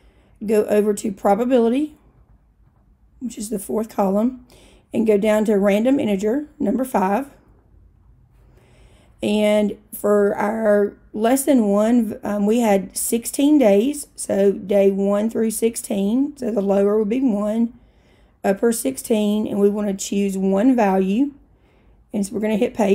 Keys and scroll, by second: 1.7 Right, 2.2 Right, 2.7 Right, 7.5 5, 17.7 Down, 18.9 Down, 21.2 Down, 22.4 Return.